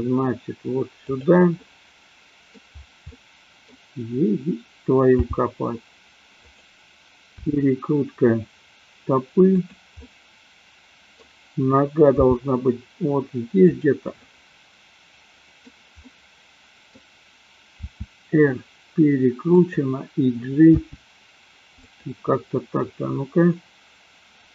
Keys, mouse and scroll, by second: 1.5-2.5 middle drag, 3.0 middle click, 5.0 g, 7.4 r, 9.8 click, 9.9-11.2 middle drag, 12.4 g, 13.8 click, 14.2-15.7 middle drag, 16.0-17.0 middle drag, 17.9 r, 19.7 click, 20.7 g, 21.9 click, 22.3-24.5 middle drag.